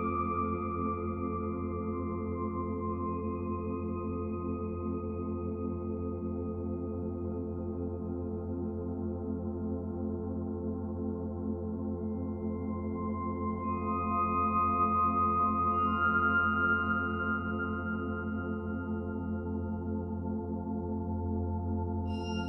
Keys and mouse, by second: 0.1 ctrl+alt+click, 0.7-1.9 drag, 2.0-3.7 drag, 4.2-5.2 drag, 6.4 alt+click, 8.2 click, 8.6 click, 8.9 click, 10.3-12.9 drag, 14.4 alt+click, 16.0 click, 16.5 click, 17.2-18.1 typing, 19.3-20.6 drag, 21.9-22.4 drag.